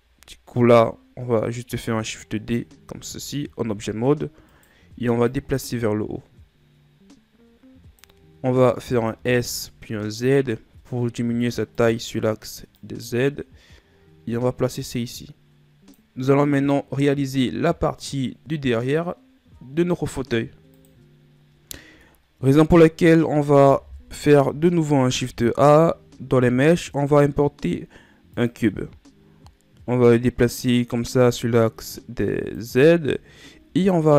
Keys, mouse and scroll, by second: 0.2-2.9 scroll up 2, 2.9 shift+d, 5.3-8.3 drag, 8.9 s, 12.8-15.9 drag, 23.0-24.1 middle drag, 24.1 KP_1, 25.3 shift+a, 30.3-33.3 drag, 33.6-34.1 scroll up 2.